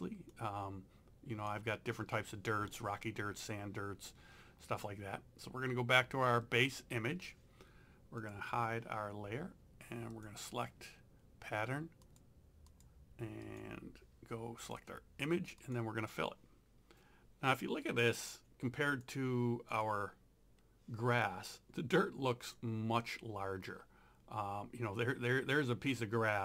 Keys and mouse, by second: 0.3 click, 6.5 click, 8.2 click, 10.1 click, 12.0 click, 18.9 click, 22.5 click.